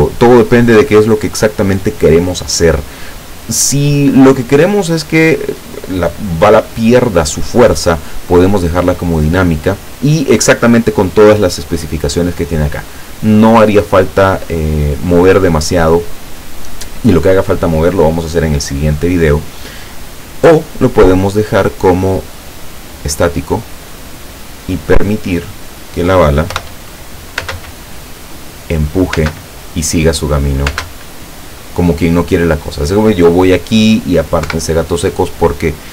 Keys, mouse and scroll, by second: 0.1 click, 10.2 scroll down 1, 11.0-11.5 scroll up 2, 11.6-12.1 scroll down 1, 12.6 scroll up 2, 17.8-18.2 scroll up 1, 20.4 click, 23.1 click, 25.1 middle click, 26.6 p, 27.5 space, 29.2 space, 30.8 space, 34.5 Escape.